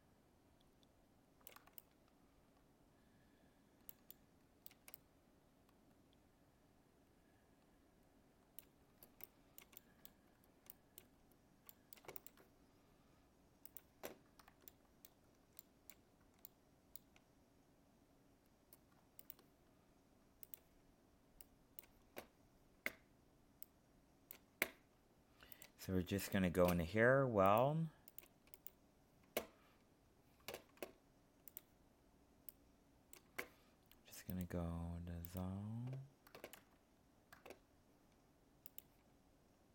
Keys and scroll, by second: 36.5 ctrl+z.